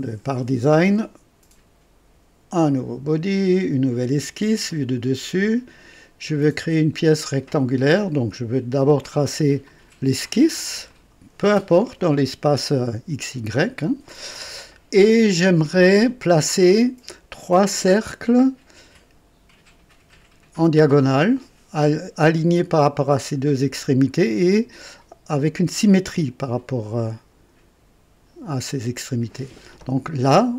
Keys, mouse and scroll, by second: 2.5 click, 3.6 click, 4.7 click, 5.5 click, 6.6 right click, 8.8 click, 9.7 click, 10.9 click.